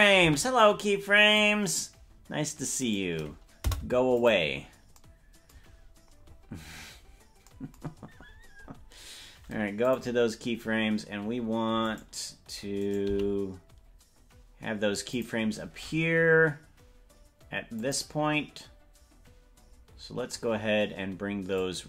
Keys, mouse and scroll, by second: 0.3 c, 3.7 Delete, 5.7-6.7 scroll down 8, 7.1-7.5 scroll down 6, 8.1 scroll down 1, 9.8 click, 11.9 right click, 12.9 right click, 13.1 g, 17.8 click, 20.1-20.7 scroll up 10, 21.6-21.8 drag.